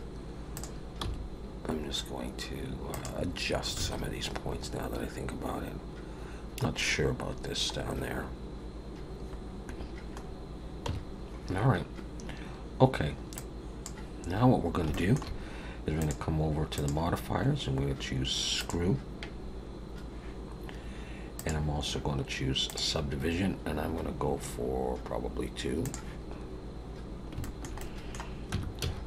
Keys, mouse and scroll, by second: 0.5 click, 1.0 g, 3.9 alt+a, 4.6 scroll up 2, 5.6-6.5 scroll down 1, 6.7 scroll up 1, 7.3-7.8 scroll down 3, 10.2-10.8 scroll up 2, 10.8 Tab, 11.1-11.8 scroll down 3, 13.3 click, 14.5-14.8 scroll down 3, 14.9 shift+middle click, 16.0 click, 16.7 click, 21.4 click, 24.4 scroll down 5, 25.9 click, 26.3-27.0 scroll up 3, 27.0-27.3 scroll down 2, 27.4 shift+middle click, 27.8 middle click, 28.5 Tab, 28.8 a.